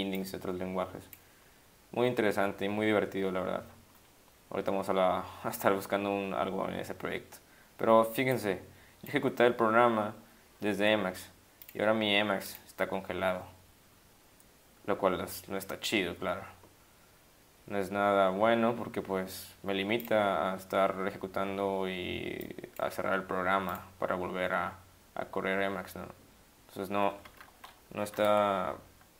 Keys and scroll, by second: 28.2 ctrl+x, 28.3 o.